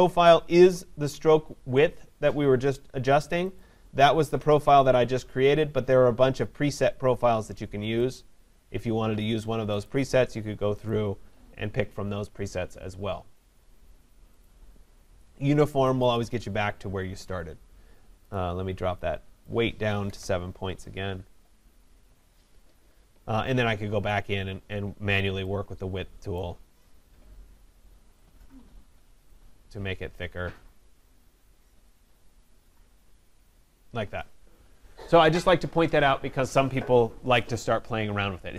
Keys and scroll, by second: 22.1 Return.